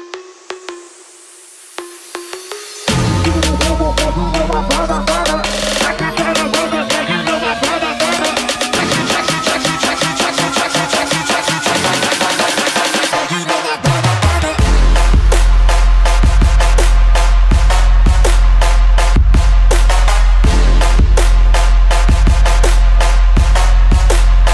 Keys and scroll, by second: 1.2-2.1 typing, 3.9 BackSpace, 4.1 BackSpace, 4.7 Return, 6.2-7.0 typing, 16.9 ctrl+z.